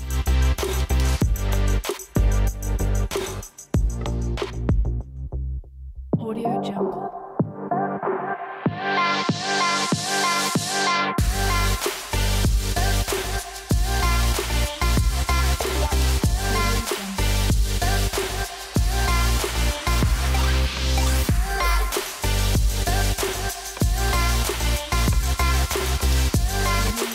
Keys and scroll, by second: 18.3 super+z.